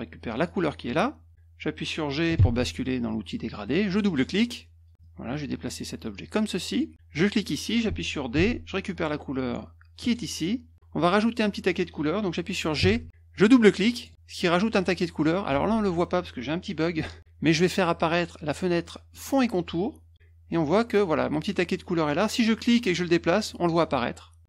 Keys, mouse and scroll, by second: 0.4 click, 2.3 g, 4.0 click, 4.2 click, 5.0-6.7 drag, 7.3 click, 8.3 d, 10.0 click, 12.8 g, 13.9 click, 14.1 click, 19.1 click, 22.5 click.